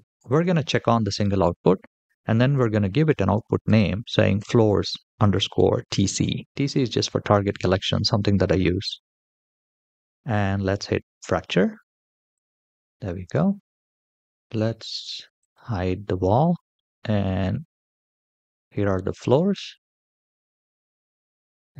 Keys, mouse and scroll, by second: 0.1 click, 0.1 scroll down 1, 0.8-8.7 drag, 3.3 o, 12.1 click, 15.2 click, 16.5-19.1 middle drag, 19.7-20.1 shift+middle drag.